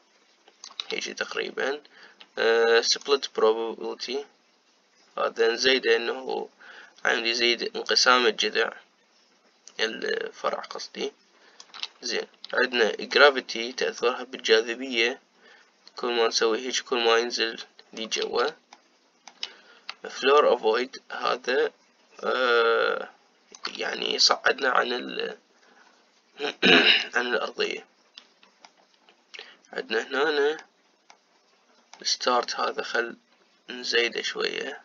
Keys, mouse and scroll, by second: 3.7-6.8 shift+drag, 13.5-14.7 shift+middle drag, 14.7-19.5 shift+drag, 19.5-21.1 shift+middle drag, 21.1-24.7 shift+drag, 24.7-25.4 scroll down 2, 25.4-28.4 middle drag, 29.3-33.6 middle drag, 33.6-34.8 shift+drag.